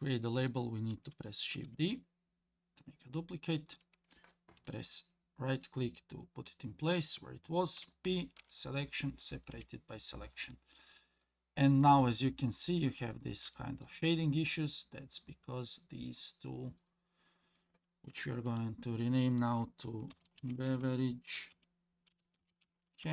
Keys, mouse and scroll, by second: 1.6 shift+d, 7.8 p, 9.5 Tab, 11.2 click, 11.8-12.6 middle drag, 12.9-13.4 scroll up 3, 13.5 shift+middle drag, 13.8 shift+scroll up 1, 14.1 middle click, 16.8 click, 18.5 F2.